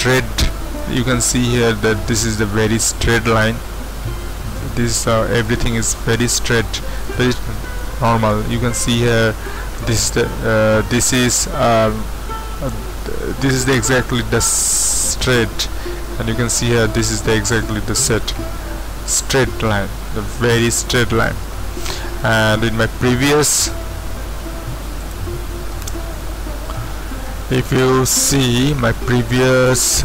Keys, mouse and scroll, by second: 21.2 click, 25.0 click, 25.3 click, 27.7-29.9 drag, 29.9 right click.